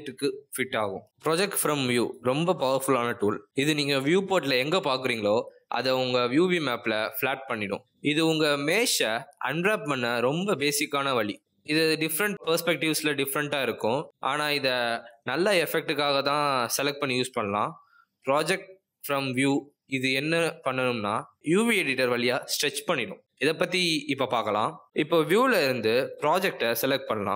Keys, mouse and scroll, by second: 18.5 middle click, 20.8 click, 26.8-27.2 scroll up 4, 27.2 middle click.